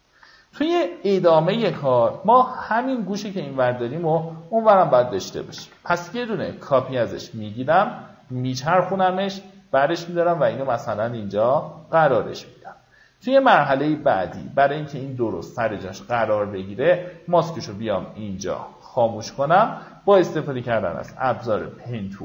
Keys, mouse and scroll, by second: 1.9-2.2 alt+scroll up 1, 4.0 alt+click, 5.6 right click, 6.5 click, 8.8-13.7 shift+drag, 14.7 click, 14.9 right click, 15.7 click, 18.5 alt+scroll up 1, 19.1-19.6 alt+scroll up 1, 19.6 click, 22.1-22.2 drag.